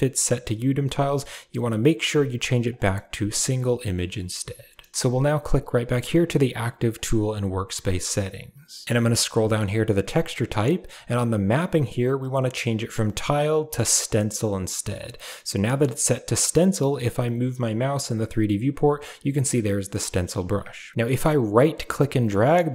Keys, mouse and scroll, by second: 4.0 shift+middle click, 7.3 click, 12.0-14.0 drag, 21.6-22.7 right drag.